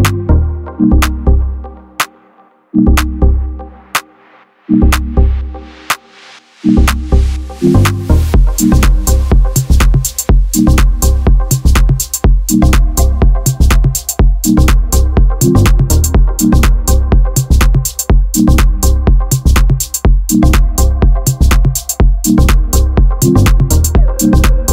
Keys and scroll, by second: 10.7 alt+c, 12.7 Tab, 13.6 m, 15.3 Tab, 16.8 ctrl+alt+shift+c, 19.4 shift+a.